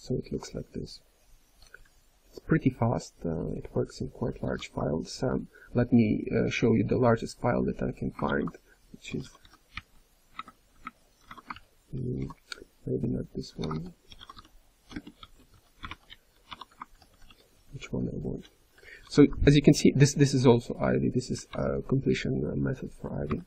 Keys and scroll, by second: 1.7-4.4 ctrl+p, 4.4 ctrl+g, 8.2 ctrl+t, 11.4-12.1 typing, 12.1 ctrl+:, 15.3 BackSpace, 16.9 ctrl+n, 17.1 ctrl+n, 17.5 ctrl+p, 18.4 ctrl+n, 19.1 ctrl+p, 21.5-23.4 ctrl+p.